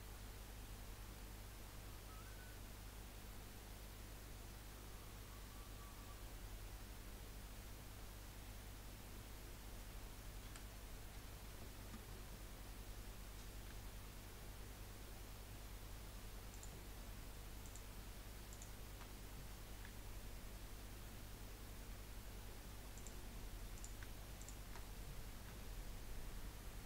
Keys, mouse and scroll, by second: 13.7 g, 17.6 click, 18.5 shift+click, 22.1 g, 23.7 click, 24.4 shift+click, 25.5 g.